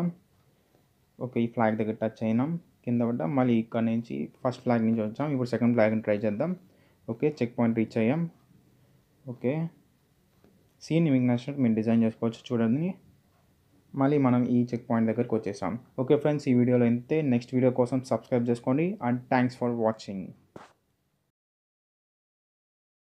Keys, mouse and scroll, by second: 3.6 d, 4.0 space, 5.5 d, 5.9 space, 7.6-9.5 typing, 13.2 typing, 16.0 a, 19.2 click, 20.8-21.3 typing.